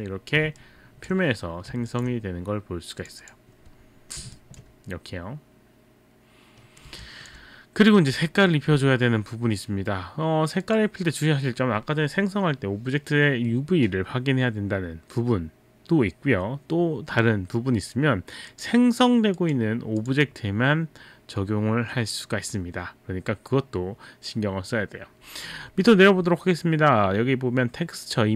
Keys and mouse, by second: 0.6 alt+click, 1.9 alt+click, 3.0 click, 3.2 click, 4.3 alt+click, 7.1 alt+click, 10.7 click, 18.5 click, 19.4 click, 20.0 click.